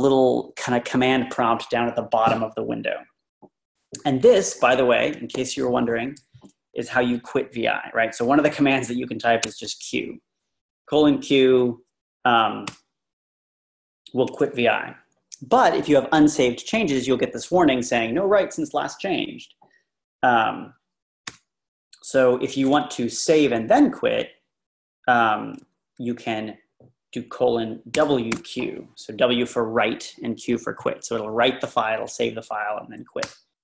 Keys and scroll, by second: 9.5 q, 12.7 Return, 21.3 Return, 28.0 typing, 33.3 Return.